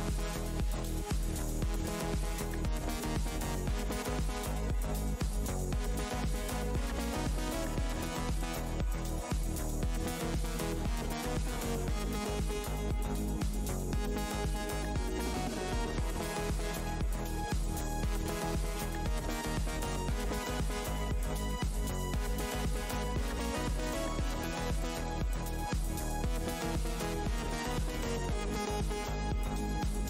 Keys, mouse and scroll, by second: 0.5 scroll, 0.6-1.2 scroll down 1, 1.2-13.5 scroll, 13.5 Tab, 13.5 click, 13.6 Tab, 13.8 shift+right click, 15.3 Tab, 15.7 alt+click, 17.0 Tab, 17.2 alt+t, 17.6 alt+scroll down 1, 17.6-19.8 typing, 19.3 alt+Tab, 19.8 alt+scroll up 1, 21.2 alt+Tab, 21.8 click, 25.2 Tab, 25.2-25.9 scroll up 1, 26.6-27.0 scroll up 1, 27.4 r, 27.9 alt+scroll up 1, 29.3 click.